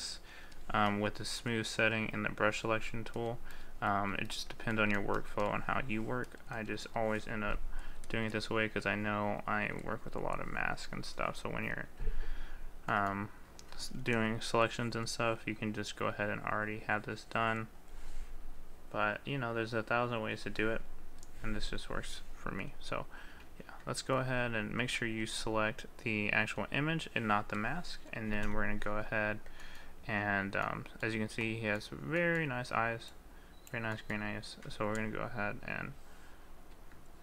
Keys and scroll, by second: 23.6 ctrl+z.